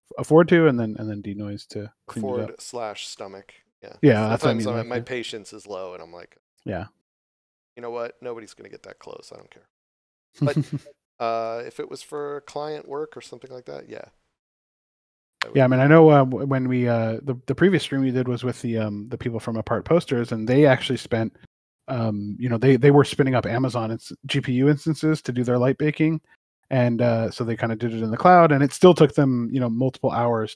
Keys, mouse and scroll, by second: 6.4 shift+middle click, 7.8 scroll up 1, 10.1 shift+middle click, 12.1 middle click, 15.7 shift+middle click, 20.2 scroll down 1, 20.7 middle click, 25.0 scroll up 1, 27.8 middle click, 28.6 shift+middle click.